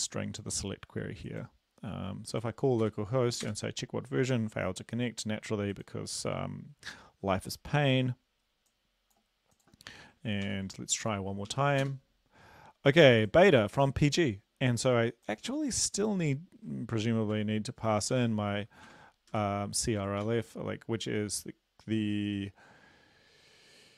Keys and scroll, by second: 2.9 Up, 3.5 Return, 10.5 ctrl+l, 11.5 Up, 11.8 Return, 17.4-19.3 typing, 19.8 Right, 20.3 ctrl+s.